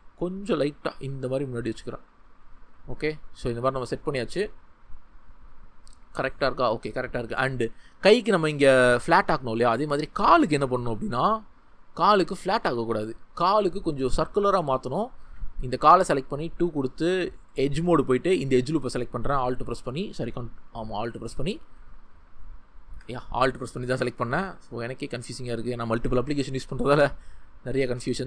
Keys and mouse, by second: 1.4-2.7 drag, 3.4 Tab, 10.0 Tab, 10.7 2, 12.5 2, 14.3 Tab, 15.7 2, 18.6 middle click.